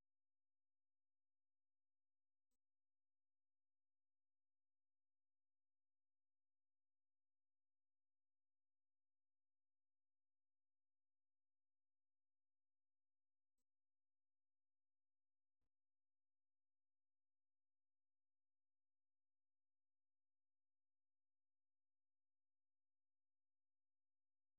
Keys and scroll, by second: 0.0-4.0 typing, 5.4-10.2 typing, 11.6-14.5 typing, 16.6 typing, 18.5-22.5 typing.